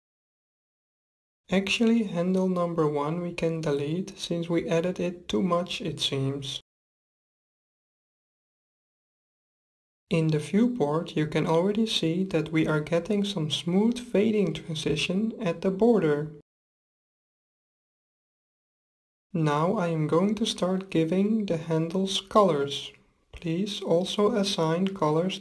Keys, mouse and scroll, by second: 0.0-1.7 drag, 1.9-3.7 drag, 5.8-7.6 drag, 12.0-13.6 drag, 18.3-20.6 middle drag, 22.8-24.5 drag.